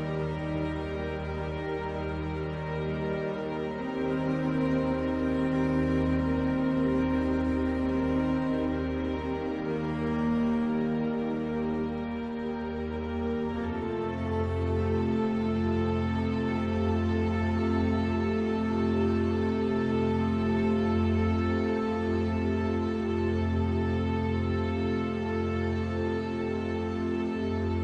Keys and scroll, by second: 2.4 ctrl+z, 6.7 ctrl+z, 9.9 ctrl+0, 25.9 ctrl+t.